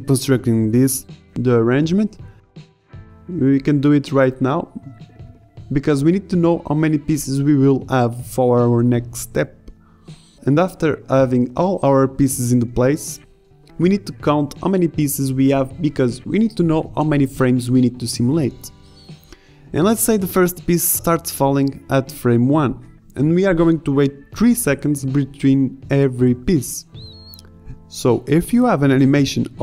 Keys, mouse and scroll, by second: 0.0-3.0 typing, 1.4 drag, 3.3 click, 3.7 click, 3.8 ctrl+z, 3.8 ctrl+x, 4.6-6.0 typing, 6.5 ctrl+z, 6.9 ctrl+z, 8.0 right click, 8.1-10.5 typing, 8.8 ctrl+z, 9.5 ctrl+z, 12.5-15.3 typing, 18.0-18.3 middle drag, 19.0 middle drag, 20.5-20.8 middle drag, 22.5-22.8 middle drag.